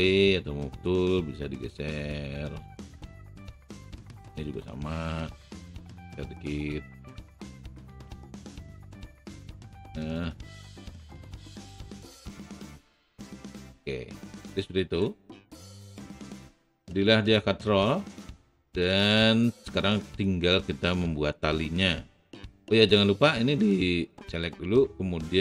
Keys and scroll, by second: 0.0 w.